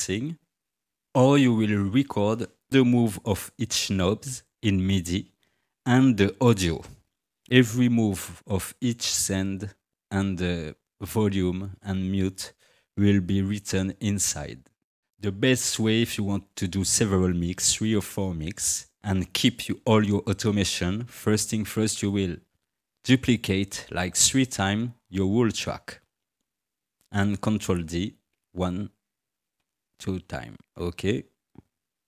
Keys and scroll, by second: 12.9 Tab, 28.3 ctrl+d, 29.6 ctrl+d.